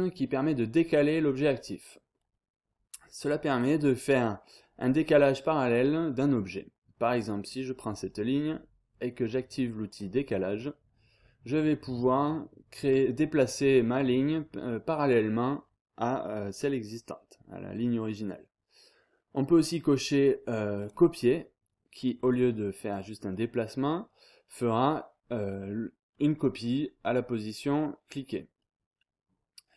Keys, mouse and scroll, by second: 3.5 click, 3.9 scroll down 1, 3.9-4.4 scroll up 1, 4.4-4.9 scroll down 2, 5.8 scroll down 2, 6.0-6.6 scroll up 2, 9.9 click, 20.8 click.